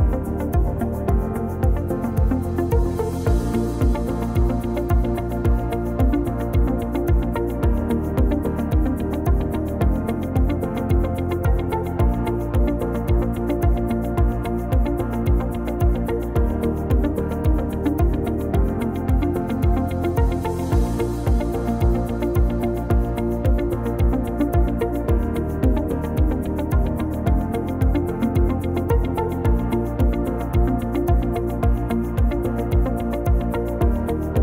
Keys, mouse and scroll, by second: 19.4 scroll down 3, 19.7-20.8 scroll up 4, 20.8 middle click, 22.7 click, 23.0-23.6 scroll down 2, 23.6 middle click, 24.1 middle click, 28.6 click, 29.0 shift+middle click, 29.4-30.1 scroll up 1, 30.4 shift+a, 33.1-33.5 scroll down 3, 33.5 s.